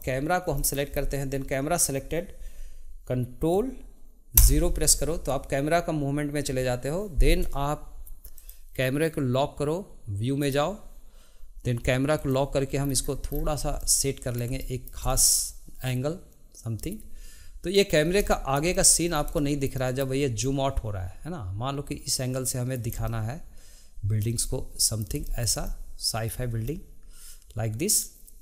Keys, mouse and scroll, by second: 0.0 click, 0.6 shift+middle click, 0.9-1.7 scroll down 1, 4.4 ctrl+KP_0, 8.4-10.5 drag, 12.1 click, 12.8 scroll down 2, 13.8-18.0 middle drag, 18.0 scroll up 2, 18.3-19.1 shift+middle drag, 19.1 scroll down 1, 19.4-28.4 shift+middle drag.